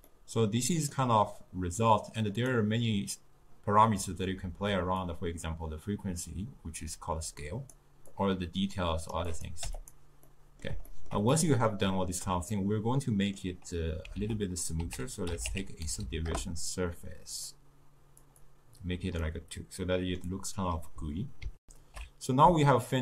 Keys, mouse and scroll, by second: 0.2-5.2 middle drag, 5.2-12.6 drag, 12.6-17.5 middle drag, 17.5 Down, 18.5 click, 19.4-21.7 middle drag, 21.7 ctrl+alt+shift+q.